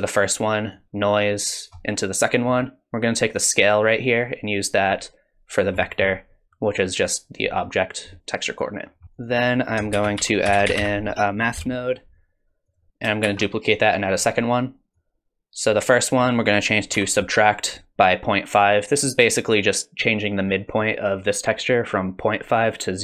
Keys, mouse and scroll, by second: 0.7 click, 3.4 click, 5.8 middle click, 8.1 middle click, 8.6 click, 9.0 middle click, 9.0 scroll down 3, 9.1 click, 9.9 shift+a, 13.2 shift+d, 14.9 click, 16.1 click.